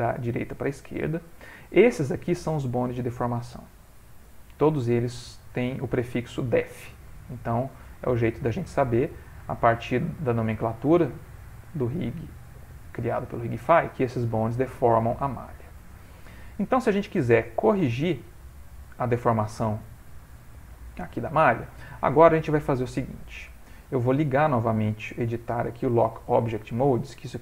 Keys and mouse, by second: 1.1 click, 3.1 click, 6.6 click, 8.4 click, 11.9 click, 14.2 click, 15.2 middle click, 16.0 ctrl+middle click, 16.6 middle click, 17.1 shift+middle click, 17.6 middle click, 19.4 ctrl+middle click, 20.3 middle click, 22.8 click, 24.6 click.